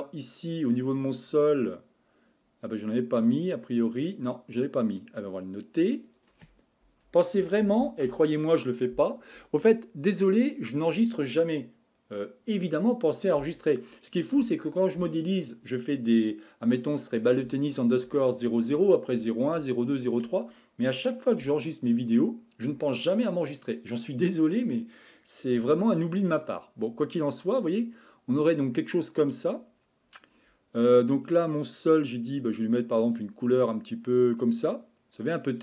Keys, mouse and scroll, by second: 0.3 click, 0.7 click, 3.3 scroll down 5, 4.8-6.1 drag, 6.2-9.2 drag, 26.1-28.3 scroll up 8, 28.3-30.2 scroll up 1, 32.1 click.